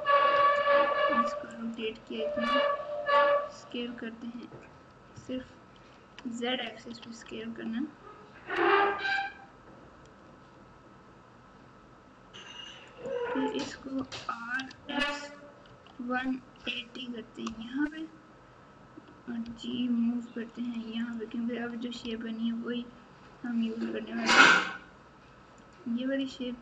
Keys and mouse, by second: 0.3 r, 2.3 s, 5.7 ctrl+z, 6.8 s, 13.9 r, 19.4 g, 22.0 r, 26.2 g.